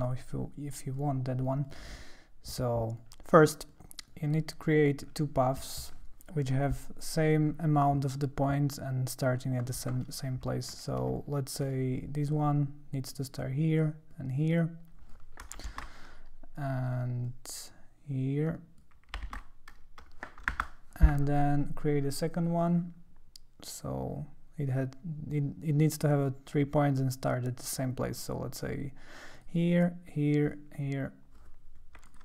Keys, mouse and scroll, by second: 1.0 shift+click, 2.0 click, 2.6 click, 3.4 click, 3.7 click, 4.3 click, 7.1 click, 10.6 ctrl+middle click, 10.7 ctrl+scroll, 11.2-13.3 drag, 14.1-15.1 drag, 15.7 shift+l, 17.3-18.8 drag, 19.4 shift+l, 20.6 Return, 22.6-29.4 drag, 30.4 click, 32.1 click.